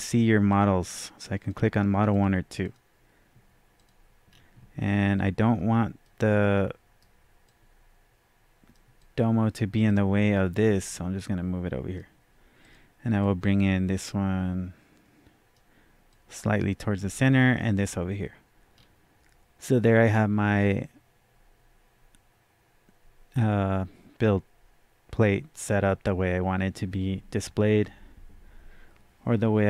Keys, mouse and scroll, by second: 0.5 click, 0.5-0.8 scroll down 1, 1.3 click, 2.0 click, 4.2-5.5 scroll down 1, 5.5-6.0 scroll up 1, 6.0-9.8 right drag, 7.4-21.0 drag, 17.2 click, 18.8 scroll down 1.